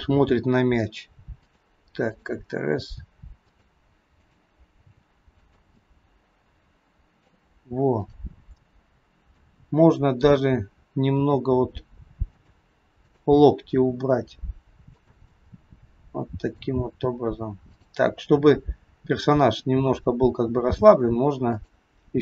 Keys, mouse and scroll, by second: 0.2 g, 2.2 click, 3.0 g, 4.2 click, 4.8 g, 5.8 middle click, 8.1 click, 9.5 middle click, 11.2 r, 13.1 click, 13.7 r, 15.2-15.5 scroll up 1, 15.5 middle click, 17.7 click, 18.8-19.7 scroll up 1, 19.7-20.5 scroll down 1, 20.5 r.